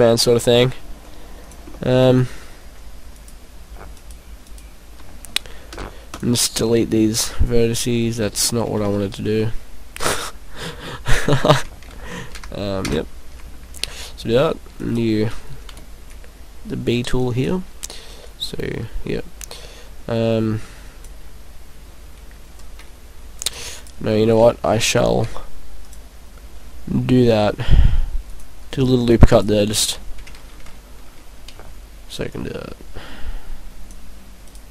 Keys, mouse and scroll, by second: 1.5 click, 1.8 middle click, 3.1 right click, 3.9 shift+right click, 4.5 right click, 5.8 Delete, 6.7 middle click, 8.9 ctrl+z, 9.4 middle click, 10.9 middle click, 11.4 ctrl+z, 12.0 ctrl+z, 12.3 ctrl+z, 12.9 ctrl+z, 14.8 right click, 15.7 b, 18.2 click, 19.7 click, 23.5 right click, 23.8 right click, 25.0 ctrl+r, 28.4 click, 29.3 right click, 31.5 b, 34.5 right click.